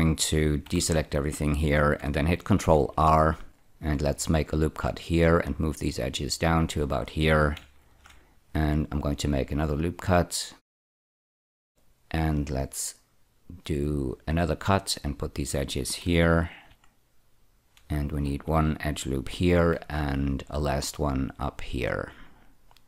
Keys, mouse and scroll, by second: 0.6 a, 0.8 a, 2.7 ctrl+r, 3.5 click, 6.3 click, 7.8 ctrl+r, 9.2 click, 10.8 click, 11.2 ctrl+r, 11.7 click, 14.2 click, 16.6 ctrl+r, 16.7 click, 17.6 click, 19.5 ctrl+r, 20.0 click, 22.4 click.